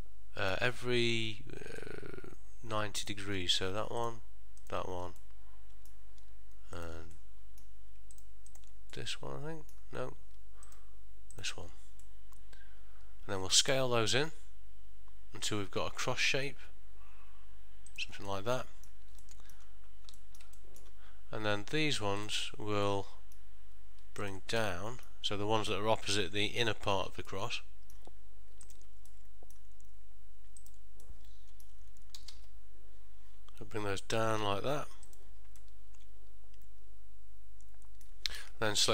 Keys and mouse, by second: 1.9 middle click, 4.1 shift+click, 5.3 middle click, 6.9 shift+click, 7.3 middle click, 8.3 shift+click, 9.1 middle click, 10.8 shift+click, 11.4 shift+click, 12.1 middle click, 14.2 s, 18.4 middle click, 19.4 ctrl+middle click, 20.5 middle click, 20.7 shift+middle click, 22.3 click, 23.0 middle click, 24.3 shift+click, 24.8 middle click, 27.4 middle click, 28.8 shift+click, 29.2 middle click, 30.7 shift+click, 31.2 middle click, 32.3 g, 35.7 middle click.